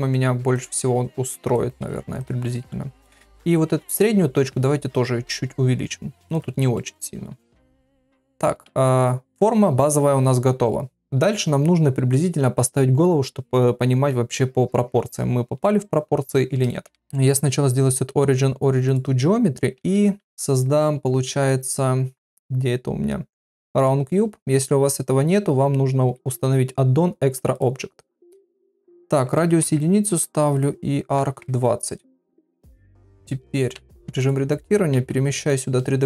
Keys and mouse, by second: 0.7 g, 2.1 click, 4.3 alt+s, 6.7 middle click, 16.9 shift+a, 17.0-19.0 right drag, 19.8 shift+a, 27.5 click, 28.8-30.0 drag, 30.5-31.9 drag, 33.7 Tab, 34.9 shift+s.